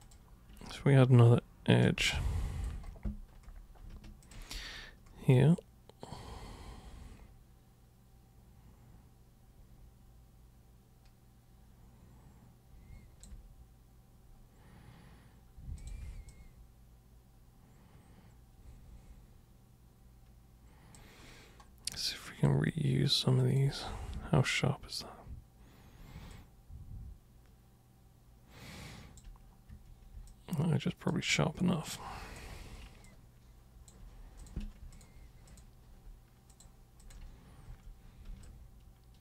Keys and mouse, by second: 0.0 super+click, 2.1 alt+super+click, 4.2 ctrl+super+click, 5.3-13.2 alt+super+drag, 15.8 super+click, 16.3-21.0 alt+super+drag, 22.0 alt+super+click, 23.4 alt+super+click, 24.1 super+3, 26.3-29.2 alt+super+drag, 29.7 super+1, 30.3 alt+super+click, 31.8 alt+super+click, 33.1 alt+click, 34.4 click, 34.9 ctrl+shift+click, 35.5 ctrl+shift+click, 36.5 ctrl+shift+click, 37.0 ctrl+shift+click, 37.7 super+w, 38.4-39.2 alt+super+drag.